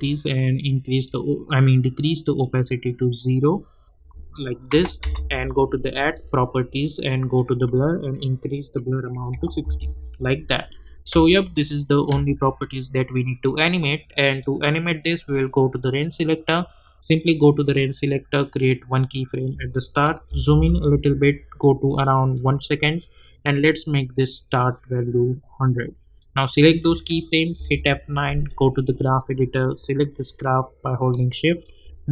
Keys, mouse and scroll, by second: 2.7-4.3 drag, 5.0 Return, 5.4 click, 9.6 Return, 14.4 click, 17.1 click, 20.2 =, 20.5 =, 22.4-27.5 drag, 27.5 F9, 28.5-32.1 drag.